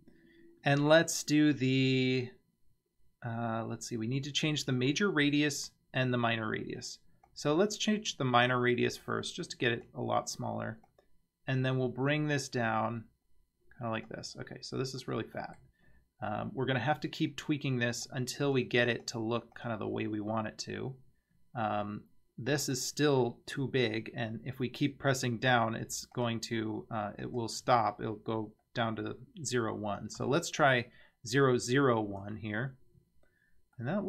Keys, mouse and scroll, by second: 7.3-9.9 drag, 10.9-14.1 drag, 14.5-15.0 scroll up 3, 15.0-15.6 middle drag, 15.9-16.4 scroll up 2, 18.0 click, 18.4 click, 18.9 click, 19.6 click, 22.6-33.0 drag, 33.8-34.0 middle drag.